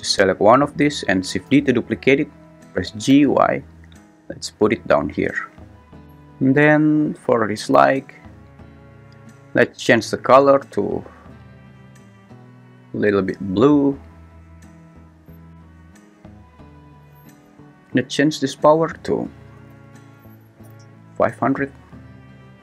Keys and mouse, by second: 1.5 shift+d, 2.0 Escape, 2.9 g, 3.1 y, 18.8-20.7 drag, 19.8 0.